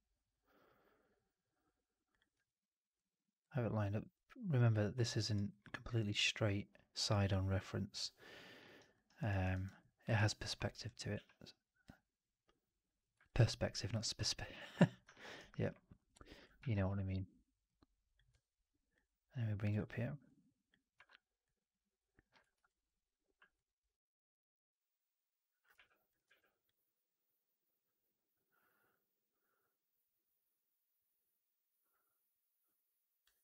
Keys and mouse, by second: 2.2 w, 4.6 alt+middle click, 5.0 alt+right drag, 5.2 alt+right drag, 5.5-8.5 alt+middle drag, 8.6 alt+right drag, 8.9 alt+right drag, 9.2 alt+right drag, 9.4 alt+right drag, 9.7 alt+middle drag, 10.0 alt+right drag, 10.3 1, 10.8 click, 11.0 w, 13.1 alt+right click, 13.8 alt+middle click, 15.0 alt+middle click, 15.2 alt+right click, 16.5 ctrl+e, 18.2 w, 19.5 click, 19.6 e, 20.8 w, 22.4 ctrl+e, 24.9 click, 25.6 w, 26.1 w, 29.0-33.1 drag.